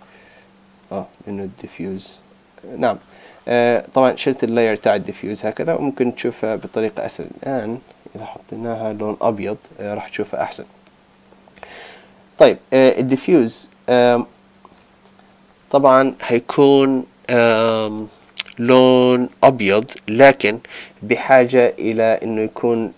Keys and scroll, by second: 8.2 super+i.